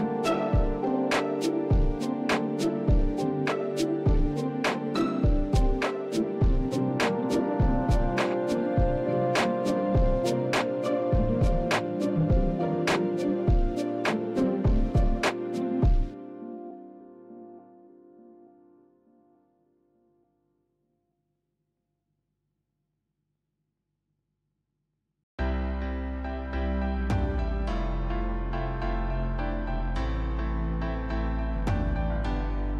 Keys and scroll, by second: 1.6 Tab, 8.3 ctrl+KP_3, 10.1 shift+z, 13.8 shift+z, 21.2 shift+a, 23.1 Tab, 23.7 s, 27.1 KP_7, 32.2 shift+z.